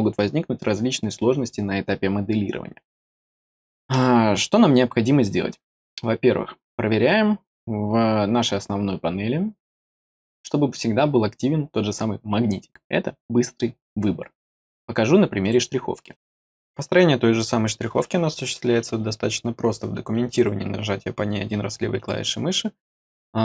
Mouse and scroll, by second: 15.4 click, 16.0 click, 21.9 click.